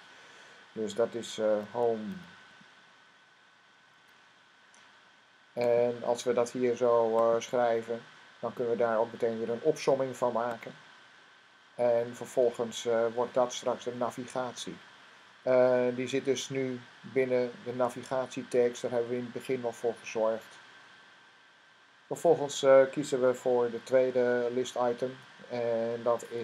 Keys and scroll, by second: 2.0-4.3 typing.